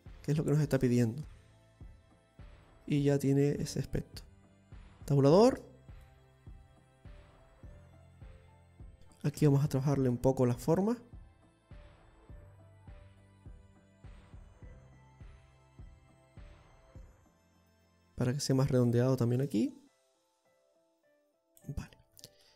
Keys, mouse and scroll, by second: 1.7-2.4 scroll down 4, 2.3 middle click, 3.6-4.4 scroll down 3, 4.3 middle click, 5.6 Tab, 6.1-6.4 scroll down 3, 6.7 middle click, 10.0 Tab, 10.6 middle click, 13.9 click, 14.7 middle click, 16.0 click, 17.1 right click, 17.8 click, 19.5 click, 20.9 g.